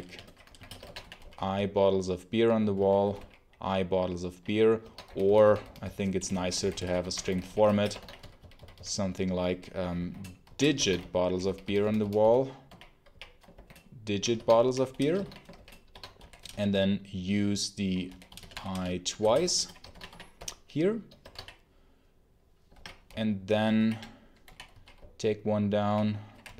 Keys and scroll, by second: 0.0-3.5 typing, 4.6-16.8 typing, 18.0-21.2 typing, 19.7 Escape, 21.1 Escape, 22.6 ctrl+d, 23.0 w.